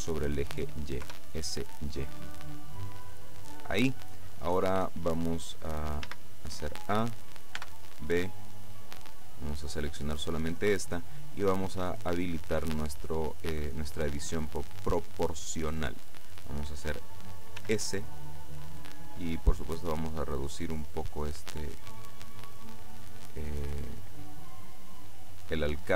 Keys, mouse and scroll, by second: 1.1 y, 3.7 click, 6.1 a, 7.6 b, 8.4-10.8 drag, 11.9 click, 14.7 click, 17.7 s, 20.2-20.9 scroll up 2, 20.9-22.1 scroll up 1, 22.1 scroll up 1, 24.5-25.9 scroll up 1.